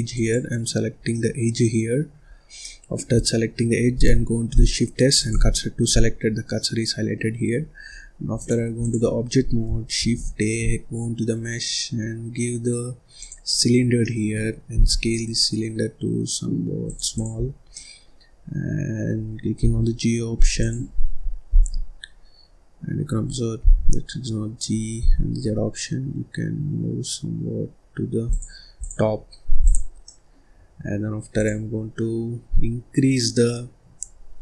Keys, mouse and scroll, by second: 0.9 scroll down 1, 1.1-2.2 middle drag, 2.2-2.6 scroll up 2, 2.6 middle click, 3.1-3.4 scroll down 1, 3.4-4.5 scroll up 1, 4.5 shift+s, 5.9 scroll up 2, 6.2 scroll down 1, 6.5-8.3 middle drag, 8.3-9.9 drag, 9.9 shift+a, 13.7 scroll down 1, 13.9 middle click, 14.7 s, 17.1 click, 17.3-17.6 scroll up 1, 17.6 middle click, 18.2-18.6 scroll up 1, 18.6-19.5 scroll down 2, 19.5 g, 20.5 click, 20.8-21.4 scroll down 2, 21.4 ctrl+z, 21.9-23.4 scroll up 2, 23.4 scroll up 1, 23.5 g, 28.7 click, 29.0-29.5 scroll down 2, 29.5 click, 30.0 middle click, 30.4-31.3 scroll up 5, 31.3 click, 32.5-33.3 scroll down 2, 33.9 scroll down 1.